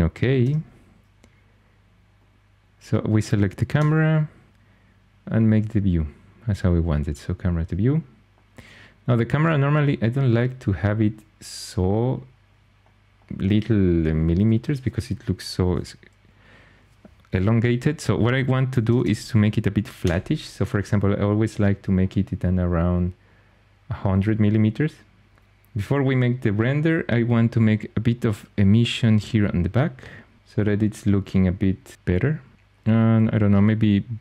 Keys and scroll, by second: 0.3 0, 3.6 0, 18.3-19.4 typing, 19.9 Return.